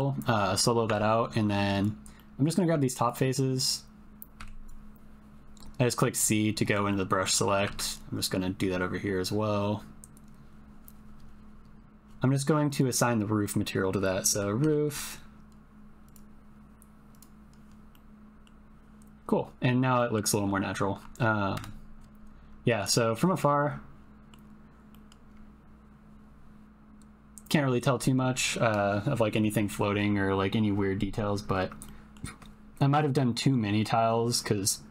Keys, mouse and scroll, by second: 0.8 Tab, 1.7 click, 2.1 middle click, 2.4 click, 3.6 ctrl+click, 4.3 c, 6.9 click, 7.6 c, 12.6-16.1 drag, 14.8 o, 18.0 click, 19.9 click, 21.5 KP_0, 22.8 click, 23.6 ctrl+click, 24.9 ctrl+click, 31.9 shift+click.